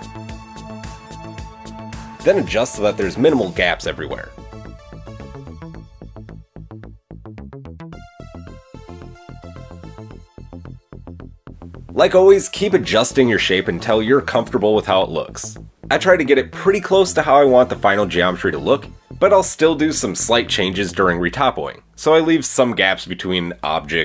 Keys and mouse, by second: 1.6 Tab, 2.5 alt+click, 3.8 click, 5.9 click, 6.8 KP_1, 7.1 KP_3, 7.9 shift+middle click, 9.3 s, 12.6 click, 16.3 click, 16.8 click, 18.2-18.5 shift+drag, 21.2-22.2 drag, 22.5 shift+click, 23.7 middle click.